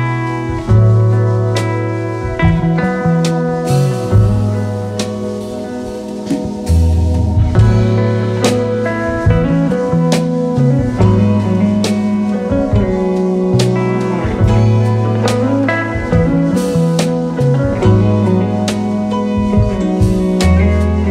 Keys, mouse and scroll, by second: 1.3 click, 7.1-8.0 drag, 14.0 v, 14.8-16.4 drag.